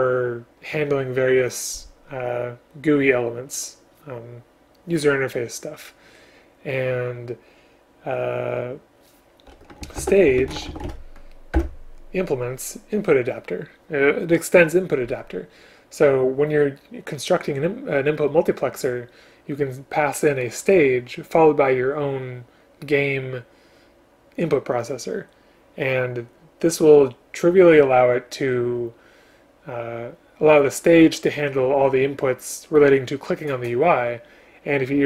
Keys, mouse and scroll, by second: 10.0 ctrl+n, 11.6 Return.